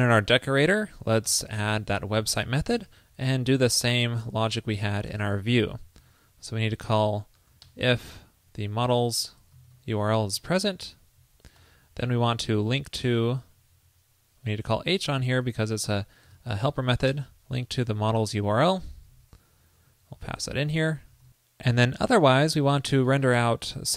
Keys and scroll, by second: 3.4 super+v, 4.9 shift+super+Right, 6.1 alt+Left, 6.2 alt+Left, 8.9 alt+shift+Right, 10.4 super+Right, 12.2 alt+Left, 12.4 alt+Left, 13.1 shift+BackSpace, 16.4 super+Right, 17.6 alt+Left, 18.2 alt+shift+Left, 19.5 alt+Left, 19.6 alt+BackSpace, 19.7 alt+BackSpace, 20.7 alt+shift+Left.